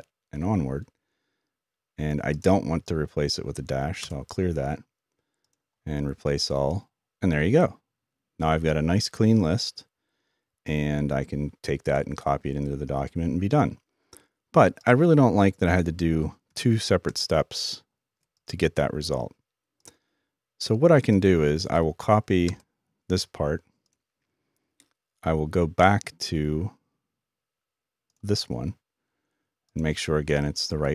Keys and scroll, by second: 8.7 typing.